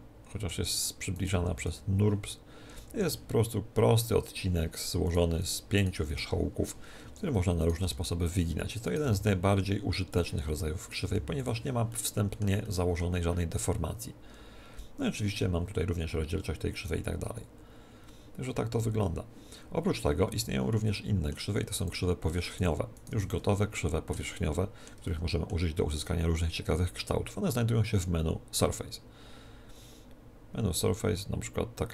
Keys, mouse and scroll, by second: 1.1-2.9 right drag, 1.3 g, 5.0-10.1 right drag, 9.0 g, 10.1 middle click, 10.6 click, 10.6 right click, 11.1-14.4 middle drag, 11.1 g, 12.0-14.4 drag, 12.0 right click, 18.5-20.2 middle drag, 20.2 Tab, 20.4 middle click, 20.7-22.3 middle drag, 21.6 x, 22.3-24.9 right drag, 22.6 x, 23.1 x, 23.7-27.0 middle drag, 25.8 shift+a.